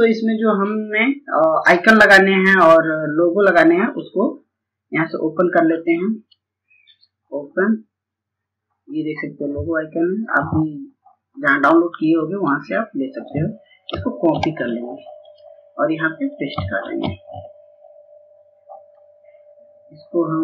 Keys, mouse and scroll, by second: 4.6-12.2 drag, 14.0 click, 16.5 scroll down 1, 17.7-20.4 drag.